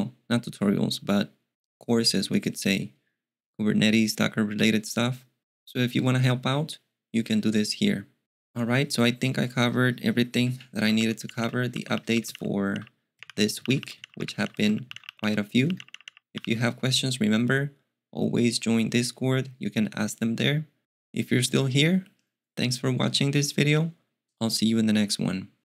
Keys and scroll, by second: 10.5-16.8 typing.